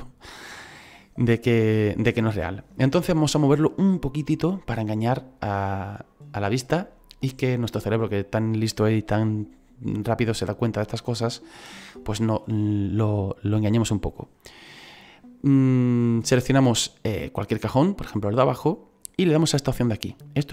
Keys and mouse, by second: 15.9 right click.